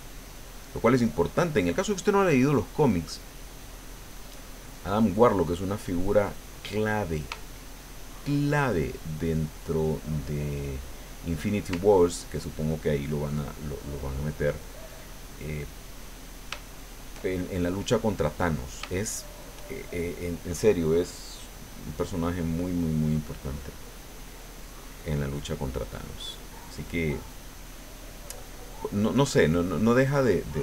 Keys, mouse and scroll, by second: 3.6-5.1 drag, 5.2-6.5 drag, 6.6 middle click, 7.5 shift+middle click, 9.2 middle click, 10.1-11.2 middle drag, 12.1-13.3 ctrl+drag, 13.7 ctrl+click, 14.6-16.0 drag, 16.1 middle click, 16.5 shift+click, 16.7 shift+click, 16.7 shift+middle click, 17.3 shift+middle click, 18.3 middle click, 18.9 shift+middle click, 19.9 shift+middle click, 21.1 click, 21.6 click, 22.3 middle click, 23.5-24.9 drag, 25.0 middle click, 25.7-27.6 drag, 29.1 middle click.